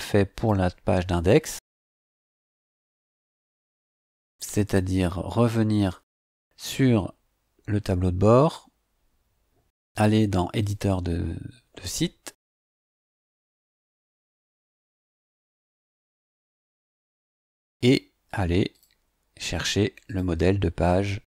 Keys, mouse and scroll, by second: 0.3 click, 5.8 click, 10.6 click, 18.7 click, 20.0 click.